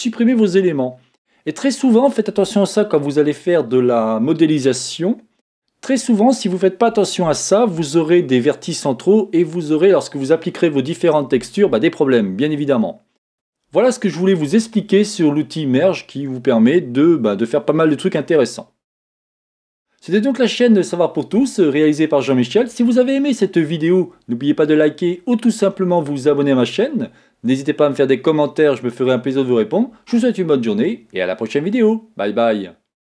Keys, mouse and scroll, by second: 0.0 alt+m.